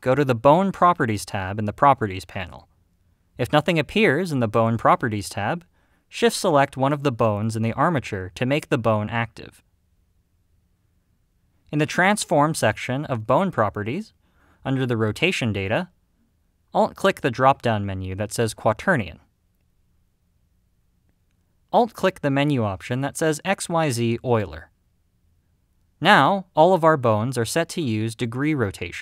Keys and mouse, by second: 3.0 click, 18.4-24.8 alt+drag.